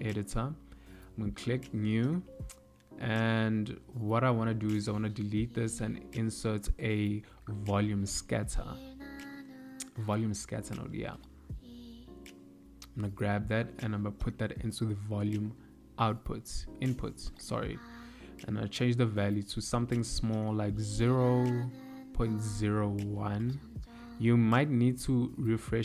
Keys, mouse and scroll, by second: 0.9 click, 2.0 middle click, 3.0 click, 3.5 x, 4.1 ctrl+middle click, 5.1 click, 5.8 shift+a, 13.4 click, 17.0 click, 22.0 click, 24.0 click.